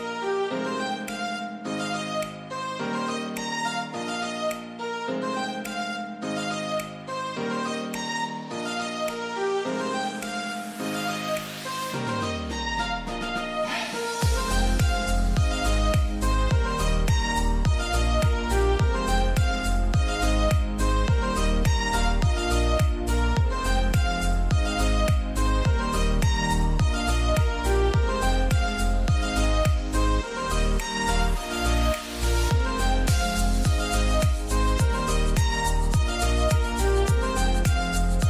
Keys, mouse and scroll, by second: 2.0 click, 5.2 click, 7.0 scroll up 1, 8.6 click, 10.0 scroll up 1, 10.8 click, 11.6-12.7 scroll down 1, 12.8 scroll down 1, 14.1 click, 16.5 scroll down 1, 17.6 scroll down 1, 19.0 click, 19.9-20.4 scroll up 1, 20.8 click, 21.8 click, 22.3 scroll down 1, 24.6 click, 25.2-25.7 scroll up 1, 26.4 click, 27.0-27.4 scroll down 1, 29.8 click, 30.2 scroll down 1, 30.8 click, 30.8-38.2 drag.